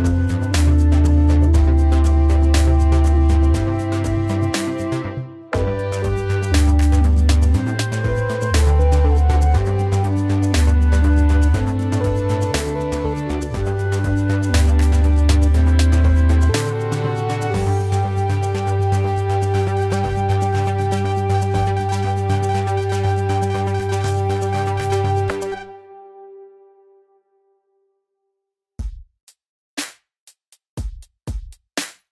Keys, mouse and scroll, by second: 11.8 ctrl+z.